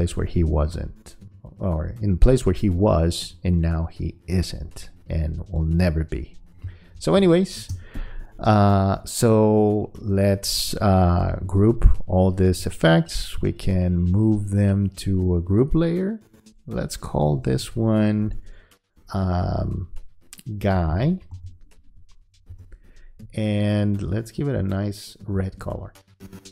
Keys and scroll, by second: 6.7 space, 20.7 g, 22.5 Return.